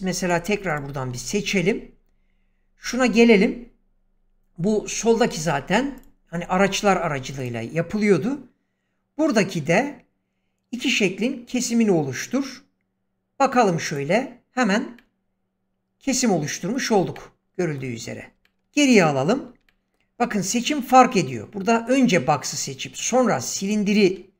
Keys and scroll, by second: 18.5 ctrl+z.